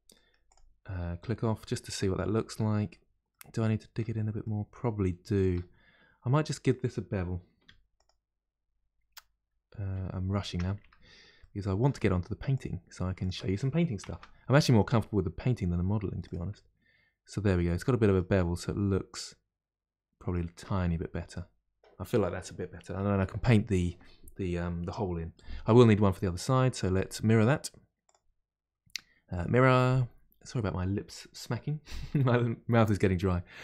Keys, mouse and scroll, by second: 0.1-0.4 middle drag, 0.4 click, 1.2-2.8 middle drag, 2.8-3.2 scroll up 1, 3.2-5.8 middle drag, 5.8 scroll up 2, 6.4-7.6 middle drag, 7.6 3, 7.9 click, 9.9 2, 10.4 Tab, 10.8 2, 11.4-12.5 middle drag, 12.5 click, 13.2 shift+click, 14.0 ctrl+b, 16.5-18.6 middle drag, 18.6-19.1 scroll down 2, 19.1-20.5 middle drag, 20.5 Tab, 20.8-21.3 scroll down 2, 21.3-22.0 middle drag, 22.0-22.5 scroll down 2, 22.5-25.6 middle drag, 25.8-28.0 middle drag, 28.0-31.0 drag.